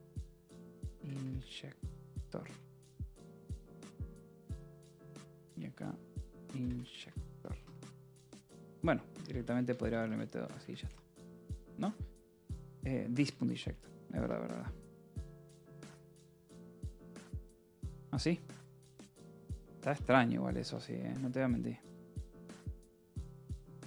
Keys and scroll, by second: 0.2-7.3 typing, 2.4 Return, 8.2 ctrl+s, 8.9-10.4 typing, 10.5 Escape, 11.5 ctrl+s, 13.3-22.8 typing, 17.4 ctrl+s, 23.7 Escape.